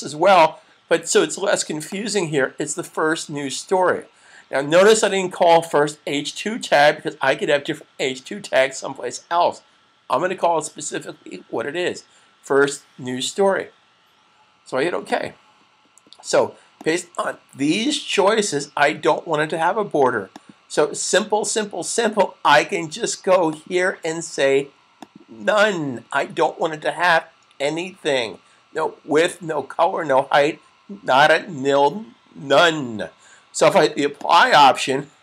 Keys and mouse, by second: 15.0 click, 20.1 click, 23.3 click, 34.0 click.